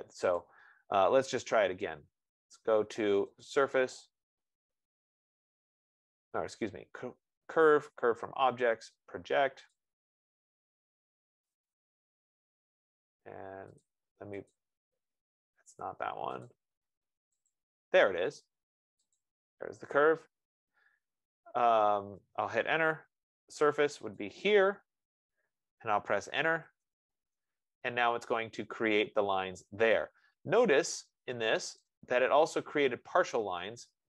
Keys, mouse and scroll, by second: 0.8 click, 3.9 click, 10.1 click, 12.0 click, 15.0 click, 16.9 click, 23.1 Return, 23.9-30.1 shift+drag, 31.2 Return, 31.9 click, 32.4 click, 33.2-34.0 scroll.